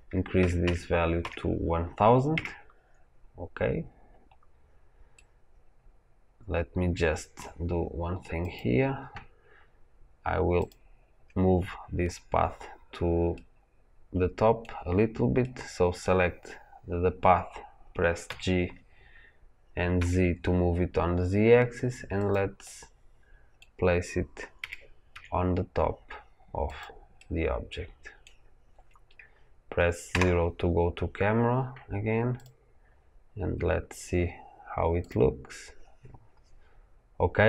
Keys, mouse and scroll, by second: 2.2 KP_0, 2.3 KP_Enter, 5.1-8.3 middle drag, 8.3 click, 9.4-10.2 scroll up 1, 10.6 click, 13.3-14.5 middle drag, 14.5-15.3 scroll down 1, 15.3-18.2 middle drag, 18.2 g, 22.5-24.5 middle drag, 24.5 g, 27.1-30.0 middle drag, 30.0 KP_0, 32.2-33.8 drag, 34.9 click.